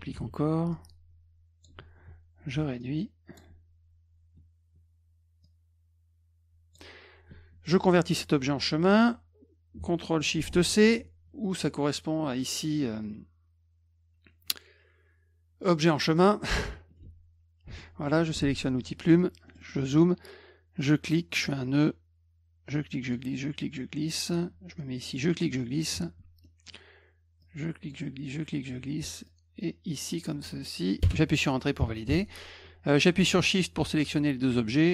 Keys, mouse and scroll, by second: 0.1 ctrl+d, 0.7-1.6 ctrl+drag, 2.8 shift+click, 5.4 click, 11.4 click, 16.1 click, 17.0 F2, 17.6 F1, 18.8 click, 19.5 middle click, 19.5 scroll up 2, 19.6 middle click, 20.8 click, 22.7 click, 23.6 click, 25.2 click, 26.4 middle click, 27.4 click, 28.3 click, 29.3 click, 31.0 Return, 32.1 F2, 33.4 shift+click.